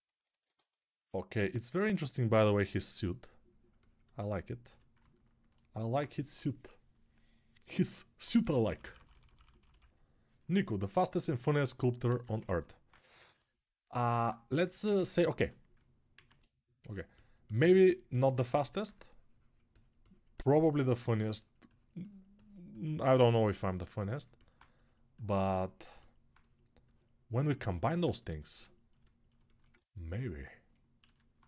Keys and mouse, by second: 2.3 s, 4.4-15.5 right drag, 4.4 s, 8.4-11.1 ], 12.1 alt+q, 14.7 alt+q, 15.1 s, 15.5-26.1 alt+drag, 16.1 alt+q, 30.9 alt+q.